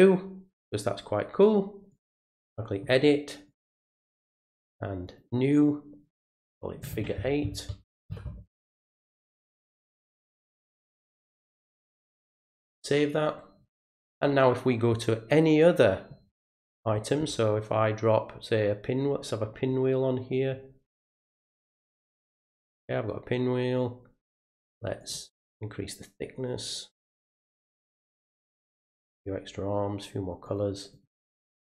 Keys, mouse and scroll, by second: 1.9 click, 3.5 click, 5.1 click, 10.6 click, 12.4 click, 21.2-22.2 drag, 23.8 click, 25.0 click, 26.6 click, 28.9 click, 30.4 click, 30.9 click, 31.5 click.